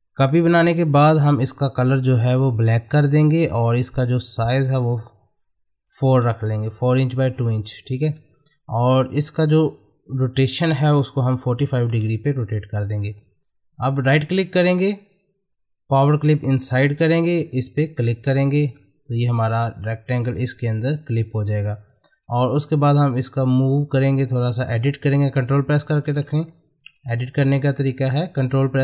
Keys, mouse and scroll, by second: 2.3 click, 5.0 click, 8.2 middle click, 8.7-10.3 drag, 13.0-13.5 scroll down 1, 13.5 click, 14.0 right click, 16.6 click, 16.7 click, 18.0-21.5 middle drag, 21.5 ctrl+Num_Lock, 21.6 middle click, 22.0-26.3 ctrl+drag, 26.3 ctrl+z, 27.4 click.